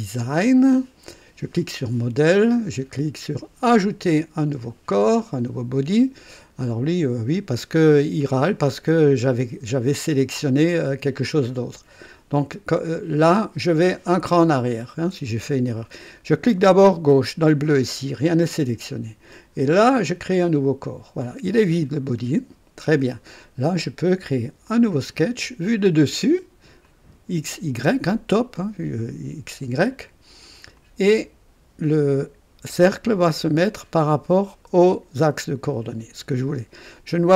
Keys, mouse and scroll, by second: 1.5 click, 4.5 click, 8.6 click, 10.0 click, 14.0 click, 17.0 click, 20.0 click, 24.6 click, 26.8 click, 30.7 click.